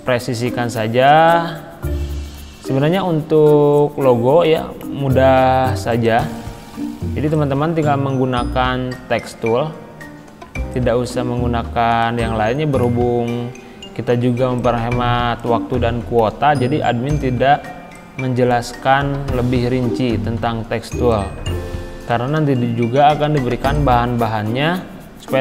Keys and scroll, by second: 19.3 ctrl+g.